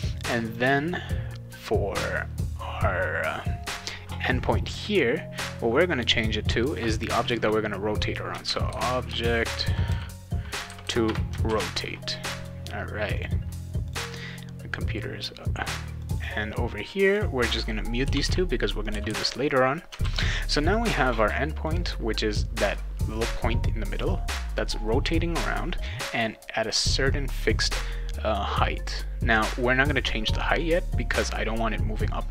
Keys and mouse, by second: 0.5 click, 0.6 click, 8.4-10.4 typing, 11.0 Return, 11.5 ctrl+s, 12.4 click, 13.2 click, 13.9 click, 16.0 click, 16.2 click, 17.0 click, 18.0 /, 18.2 /, 18.8 click, 18.9 /, 19.1 /, 20.0 ctrl+s, 20.7 click, 21.1 click, 21.6 click.